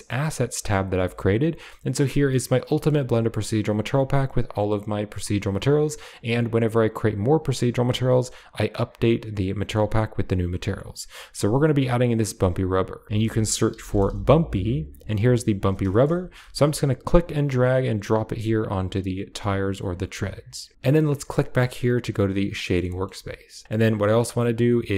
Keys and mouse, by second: 2.2 click, 3.6-8.8 drag, 13.0-14.8 drag, 15.8 shift+middle click, 20.0 click, 21.2 click, 22.6 middle click, 22.8 shift+middle click.